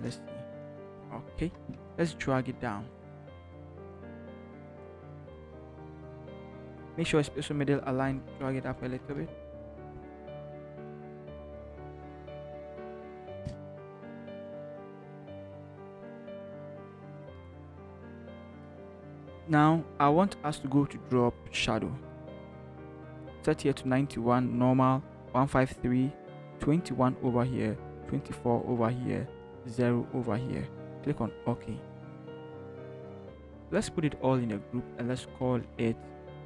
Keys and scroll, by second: 1.4 b, 4.2 v, 6.8 ctrl+shift+v, 7.0 t, 8.0 Up, 8.5 Up, 8.9 Up, 9.2 Up, 9.5 Up, 10.1 Up, 11.0 Up, 11.8 =, 11.9 =, 12.3 Up, 12.5 Up, 12.6 Up, 12.8 Up, 14.3 Up, 14.7 Down, 14.9 Down, 15.1 Down, 35.4 ctrl+g.